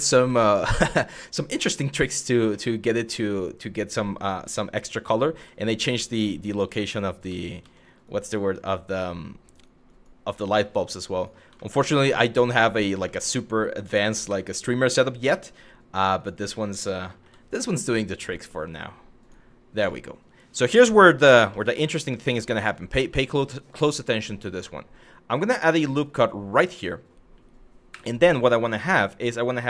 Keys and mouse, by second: 0.0 shift+middle click, 0.7 shift+middle click, 2.3 shift+middle click, 3.2 click, 3.7 f, 4.8 click, 5.0 g, 6.2 ctrl+z, 6.9 ctrl+z, 7.8 click, 8.0 g, 9.1 click, 9.6 click, 10.2 g, 10.8 click, 11.3 shift+middle click, 12.8 shift+middle click, 13.6 2, 13.9 w, 14.5 2, 15.8 click, 16.6 shift+middle click, 18.8 click, 19.6 shift+middle click, 21.2 shift+middle click, 22.2 shift+middle click, 25.3 click, 26.2 click, 27.5 w, 29.5 e.